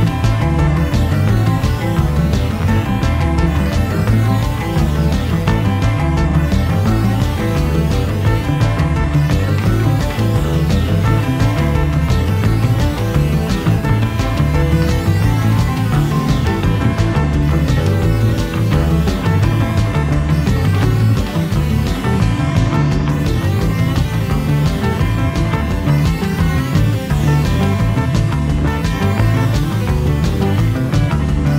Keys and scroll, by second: 8.2 v, 13.3 i, 15.2 v.